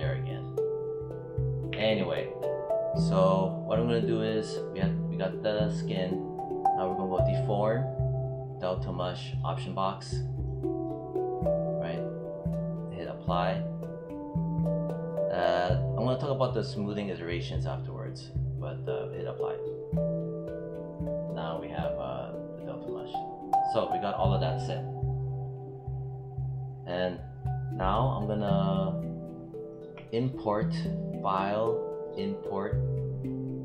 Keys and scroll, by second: 1.6 w.